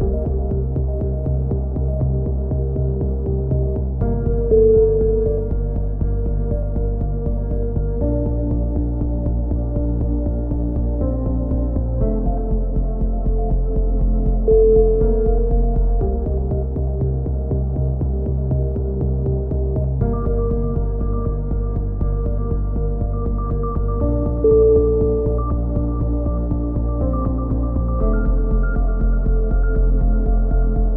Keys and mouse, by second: 0.8 right click, 1.0-2.8 typing, 3.2 click, 6.4 ctrl+r, 8.3-9.3 right drag, 8.5 g, 10.1 right click, 10.4 KP_3, 10.8 click, 11.4 a, 11.4 z, 11.7 click, 12.6 KP_7, 12.8 click, 13.2 b, 13.7 click, 13.7 x, 15.6 click, 17.3 click, 17.8 click, 18.5 KP_7, 18.7 z, 21.0 k, 24.9 a, 25.1 right click, 25.6 alt+m, 26.1 a, 26.2 z, 26.3-27.5 drag, 27.3-29.6 typing, 27.9 Tab, 27.9 click, 28.1 right click, 28.9 right click, 29.4 Tab, 29.9 ctrl+n, 30.2 click.